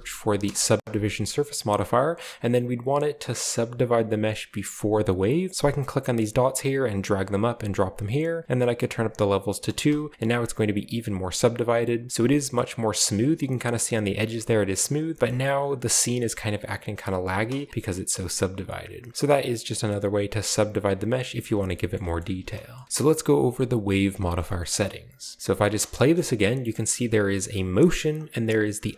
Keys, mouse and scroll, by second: 0.4 Return, 6.3-7.6 drag, 9.0 click, 9.8 space, 11.2 middle click, 11.3-12.1 scroll down 1, 11.4 middle click, 12.5-13.3 scroll up 1, 13.1 space, 14.2 space, 17.0 middle click, 17.4 space, 20.2 click, 20.6 scroll down 1, 20.8-21.3 middle drag, 21.5 shift+middle click, 21.9 middle click, 22.1 shift+middle drag, 22.7 middle click, 22.8 ctrl+b, 23.5 click, 24.3-24.7 scroll up 3, 24.7-25.6 middle drag, 25.6 space, 26.1 shift+middle click, 26.3-27.2 shift+middle drag.